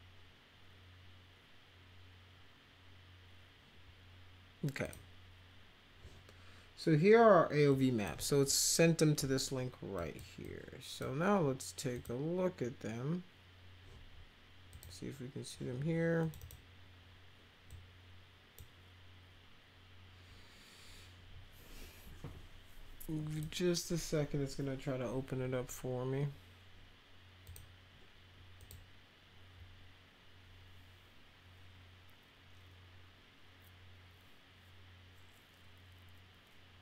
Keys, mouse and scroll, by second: 4.9 click, 7.7 click, 10.0 click, 10.4 click, 11.9 click, 14.7 click, 16.2 click, 16.4 click, 17.7 click, 23.4 click, 27.4 click, 28.6 click.